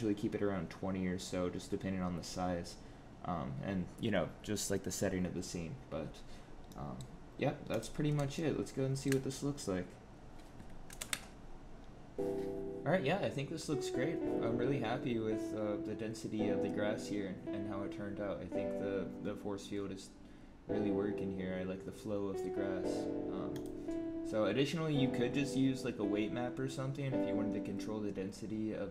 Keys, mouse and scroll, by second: 6.6 middle click, 7.6 click, 8.3 shift+middle click, 10.8 ctrl+alt+KP_0.